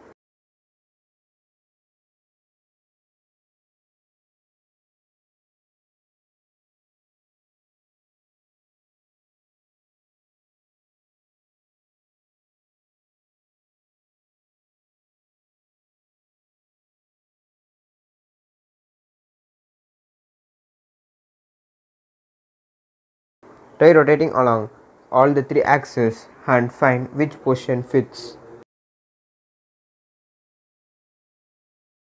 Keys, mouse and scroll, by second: 0.8-4.9 drag, 4.9-23.0 drag, 23.0-32.1 drag.